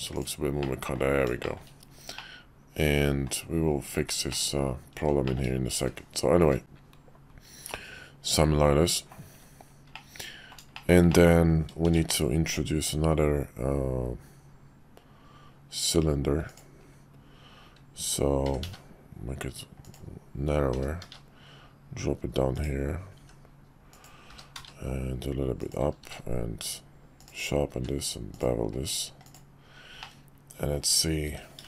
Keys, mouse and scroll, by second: 0.1 click, 0.6-1.0 middle drag, 1.4 shift+middle click, 2.1-3.3 middle drag, 4.3-5.0 middle drag, 5.2 shift+middle click, 6.4 `, 6.6-9.1 middle drag, 9.9 middle click, 10.7 shift+middle click, 11.1 middle click, 11.8 shift+a, 18.4 s, 20.7 g, 23.2 s, 24.3 g, 26.0 q, 27.7 q, 30.0-30.8 middle drag, 31.2 s.